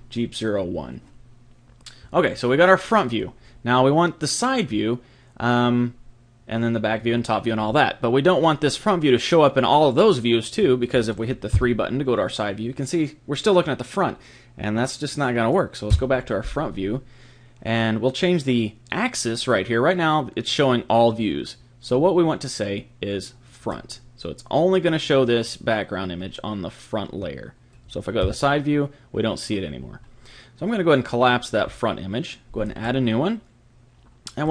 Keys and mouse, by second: 0.0 click, 11.5 KP_3, 15.9 KP_1, 20.4 click, 28.2 KP_3, 31.1-34.5 drag.